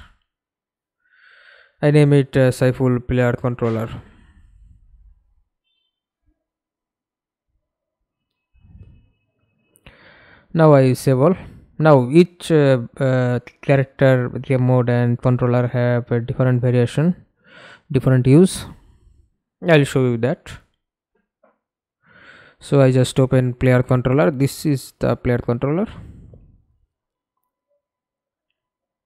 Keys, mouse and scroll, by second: 0.0-4.7 typing, 14.2 double click, 24.0 middle click, 25.7 middle click, 26.7 ctrl+space.